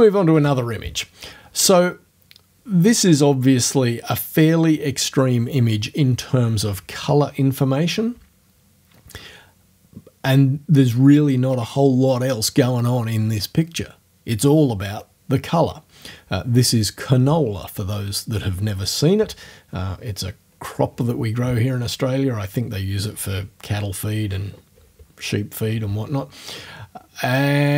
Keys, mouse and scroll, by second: 0.4 space.